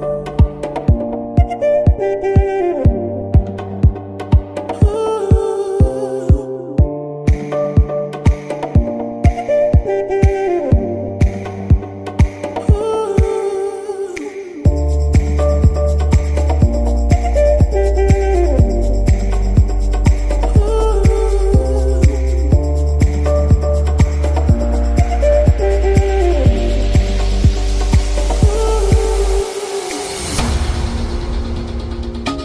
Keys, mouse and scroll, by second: 5.3-7.2 middle drag, 7.2 space, 7.8 space, 8.7 shift+Left, 9.3 Right, 12.3 KP_1, 12.9-13.4 scroll up 2, 13.4 z, 13.9-14.2 scroll up 2, 14.2-14.6 middle drag, 14.6 z, 15.0-16.0 scroll up 6, 15.4 shift+middle click, 16.0 scroll down 2, 16.1 middle click, 17.0-17.3 scroll down 2, 17.3 shift+middle click, 17.8 scroll down 2, 17.9-18.4 middle drag, 18.4-18.7 scroll up 2, 18.7-20.5 shift+middle drag, 20.5-21.1 scroll down 2, 21.1-21.9 middle drag, 21.9-22.2 scroll up 2, 22.2-23.4 middle drag, 23.4 scroll down 2, 23.5-24.7 shift+middle drag, 24.7-25.4 scroll down 2, 25.4-26.1 middle drag, 26.1 KP_1, 27.0 z, 28.1-31.2 middle drag.